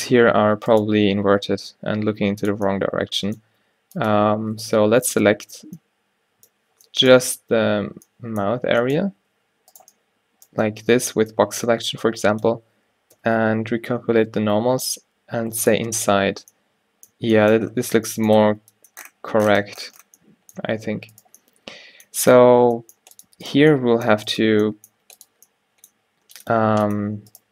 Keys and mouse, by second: 1.1 g, 3.8 g, 4.4 a, 5.3 l, 7.7 z, 9.2 a, 9.4 b, 10.7 b, 13.3 z, 14.5 ctrl+n, 16.5 Tab, 17.2 a, 18.5 a, 20.7 Tab, 22.7 g, 23.5 click, 25.1 g.